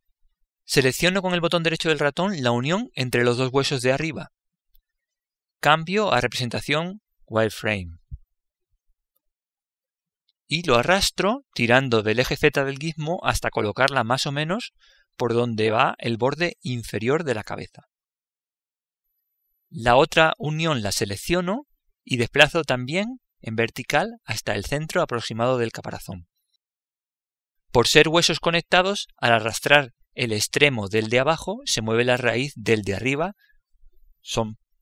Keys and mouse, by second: 3.0 right click, 10.3 z, 10.7 z, 15.4 click, 21.6 right click, 23.2 click, 30.9-34.8 right drag.